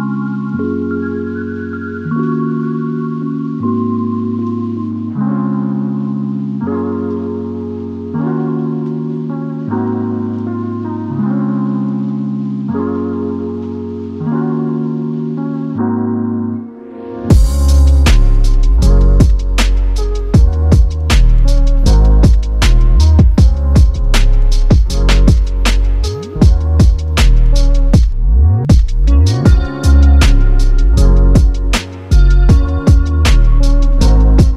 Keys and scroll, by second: 28.1 typing.